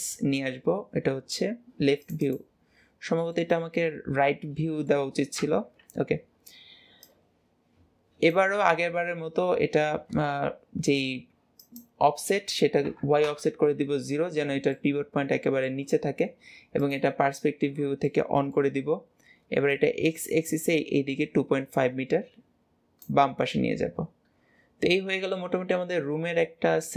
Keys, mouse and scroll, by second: 3.2-5.3 middle drag, 5.3 KP_3, 6.8 click, 9.8 ctrl+z, 11.5-14.5 drag, 14.5-16.7 middle drag, 16.7 click, 17.9 middle click, 18.7-19.5 scroll up 1, 19.5 click, 23.2-26.3 middle drag.